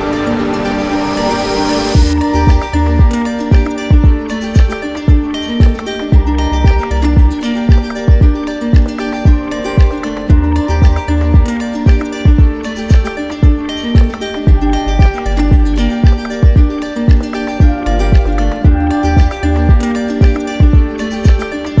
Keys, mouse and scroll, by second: 0.7 click, 1.6 click, 2.1 click, 2.4 click, 3.4 click, 4.7 right click, 8.4 click, 9.2 click, 10.1 click, 10.8 click, 11.4 click, 13.0-13.7 alt+click, 13.5 alt+click, 14.1 alt+click, 14.9 alt+click, 15.4 alt+click, 16.1 alt+click, 17.3 right click, 18.0 click, 18.3 click, 19.1 click, 20.1 click, 20.8 click, 21.4 click.